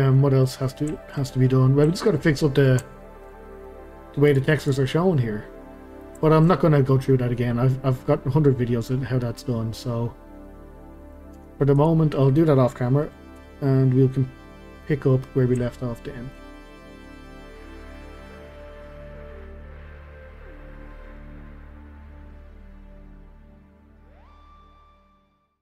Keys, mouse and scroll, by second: 0.2-1.3 middle drag, 1.3-1.9 scroll up 2, 1.9-3.5 shift+middle drag, 3.5 scroll down 2, 3.6-4.3 middle drag, 4.3 click, 4.6 click, 4.8-9.5 middle drag, 11.4 Tab, 11.8 click, 13.0 middle click, 13.4 Delete, 14.5 scroll down 1, 14.8-15.1 scroll up 1, 15.1-25.6 middle drag.